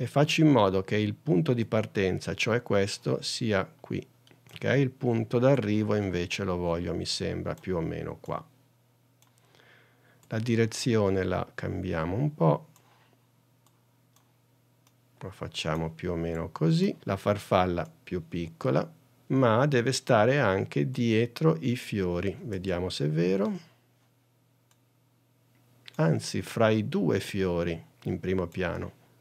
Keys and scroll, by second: 0.0 super+d.